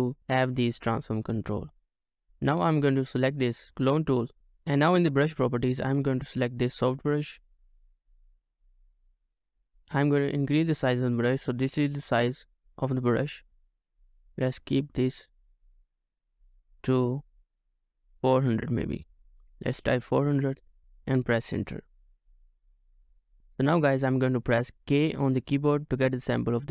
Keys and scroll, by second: 20.5 typing, 20.8 Return.